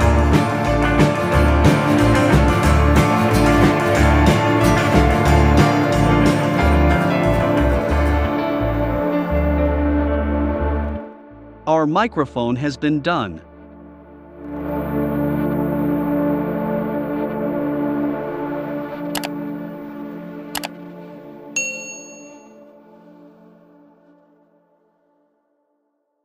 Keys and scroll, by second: 5.4 shift+c, 6.4 BackSpace, 8.2 BackSpace, 9.0 v.